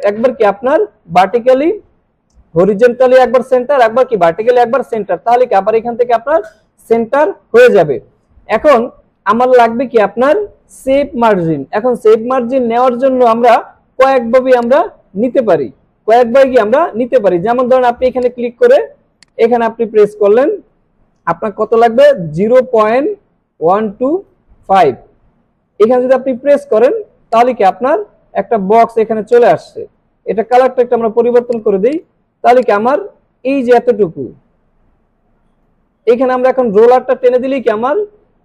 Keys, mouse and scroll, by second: 8.2 alt+scroll down 1, 8.4 space, 8.5 click, 9.1 alt+scroll up 1, 12.0 space, 12.1 click, 12.4-13.0 space, 13.7 alt+scroll up 1, 14.0 alt+scroll down 1, 14.5 space, 14.6-15.5 click, 15.0-16.8 space, 16.4 space, 18.2 click, 19.2 click, 27.3 click, 27.4-35.7 drag.